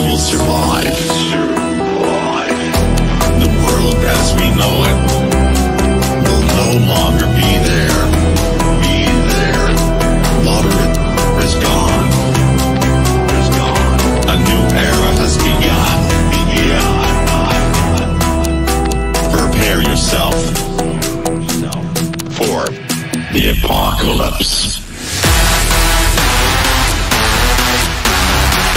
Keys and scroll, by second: 2.7 shift+Page_Down, 16.2 Escape, 18.8 shift+F2, 19.0 Escape, 19.8 F9.